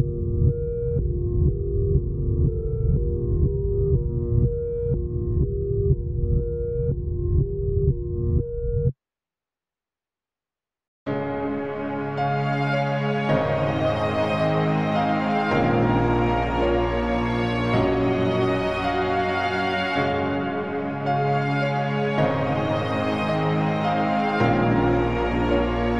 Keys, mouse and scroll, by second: 6.9 alt+a, 12.6 scroll down 5, 12.9 scroll up 5, 13.5 click, 14.0 alt+d, 16.9 click, 18.1 b, 19.5 click, 21.0 click, 24.2 click.